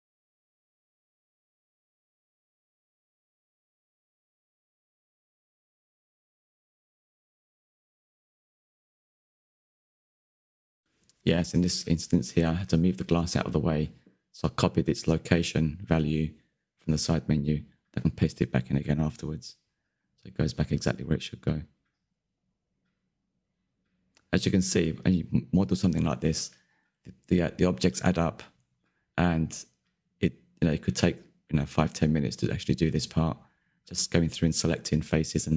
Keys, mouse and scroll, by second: 1.0 middle click, 1.3 click, 2.8 click, 2.9 drag, 3.0-4.7 middle drag, 5.2 shift+middle click, 5.8 scroll up 4, 5.9 shift+middle click, 6.3 click, 6.8 middle click, 7.4 right click, 7.7 scroll down 1, 8.0 n, 8.3-9.8 middle drag, 9.8 ctrl+c, 10.0 click, 10.4-10.7 middle drag, 10.7 click, 10.8 Tab, 11.2 click, 12.1 click, 12.8 ctrl+z, 13.9-15.9 drag, 16.3-17.4 drag, 17.6 Tab, 17.7 click, 18.4 ctrl+v, 19.2 click, 19.7 middle click, 20.7-22.5 drag, 22.5 e, 23.0 click, 25.3 click, 25.8 middle click, 26.2 scroll down 3, 26.4 shift+middle click, 27.0 n, 27.1-28.4 middle drag, 29.4 click, 29.5 middle click, 29.8 Tab, 29.9 scroll up 2, 30.1 Tab, 31.2 click, 31.8 Tab, 32.3 middle click, 32.8 ctrl+KP_3, 33.0 shift+middle click, 33.4 ctrl+s, 33.5 scroll up 3, 33.8 Left, 34.0 shift+click, 34.8 ctrl+KP_Add, 34.9 ctrl+KP_Add, 35.2-35.5 scroll up 2.